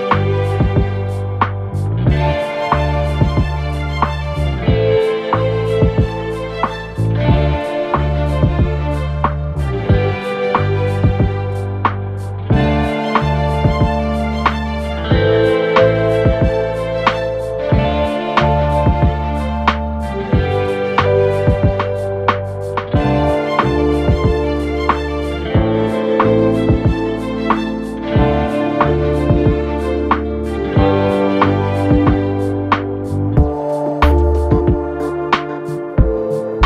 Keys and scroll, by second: 2.1 ctrl+d, 2.3 Escape, 3.8 4, 4.5 Delete, 9.8 2, 10.8 Delete, 11.8 Delete, 15.1 Escape, 15.8 ], 20.5 ctrl+z, 26.8-28.6 typing, 32.4 ], 33.6 4, 33.9 3, 35.8 4.